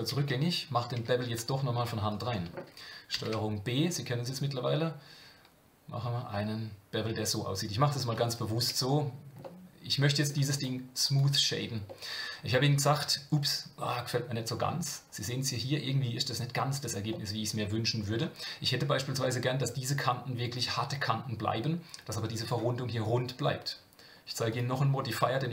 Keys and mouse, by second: 0.9 Tab, 2.1 alt+click, 3.1 ctrl+b, 8.6 Tab, 9.4 middle click, 10.5-11.2 right drag, 11.9-14.6 middle drag, 17.1-18.1 middle drag, 24.5-25.5 drag.